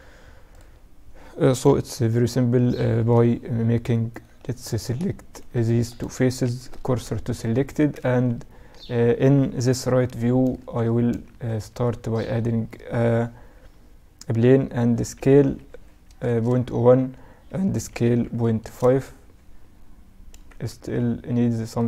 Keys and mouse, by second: 1.8 KP_1, 3.4-4.8 middle drag, 4.8-6.9 right drag, 5.9 shift+s, 7.0 Tab, 7.5 shift+a, 9.1 KP_3, 10.0 a, 10.9 shift+a, 14.6 s, 17.1 s, 19.0 z, 19.7 z, 20.1 s, 21.4 z.